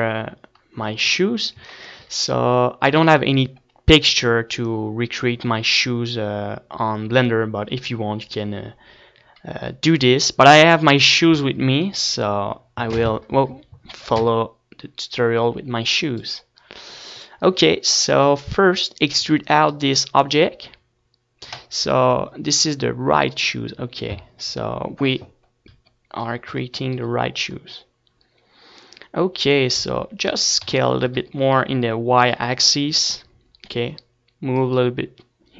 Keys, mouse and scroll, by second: 0.4 z, 2.3 Tab, 3.1 Tab, 7.3 a, 10.8 middle click, 17.8-20.7 right drag, 20.1 click, 20.5-21.9 middle drag, 21.2 e, 21.9-24.6 right drag, 22.5-24.6 drag, 28.8 s, 32.9-34.8 right drag, 33.1 s, 35.0-35.5 drag.